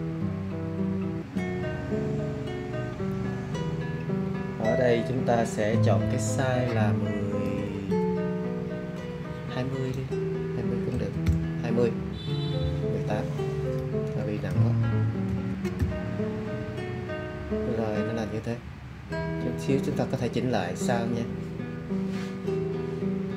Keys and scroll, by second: 10.9 2, 11.2 0, 15.2 1, 15.7 8.